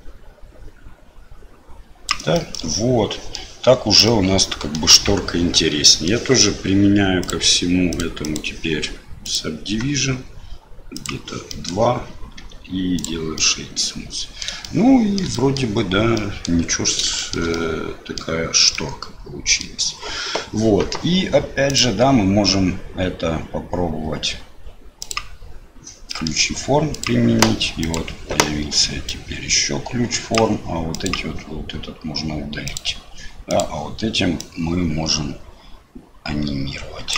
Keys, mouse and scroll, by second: 2.3-3.3 middle drag, 4.0 middle click, 5.8 middle click, 7.2 click, 7.9 click, 8.2-9.4 drag, 11.0 click, 11.4 middle click, 12.3 q, 13.3-14.4 middle drag, 14.6 shift+middle click, 15.3 middle click, 16.1 middle click, 17.1 shift+middle click, 17.5 middle click, 18.7 middle click, 21.7-25.2 drag, 26.1 middle click, 27.8 click, 29.1-30.4 drag, 31.0 click, 33.5-37.1 drag.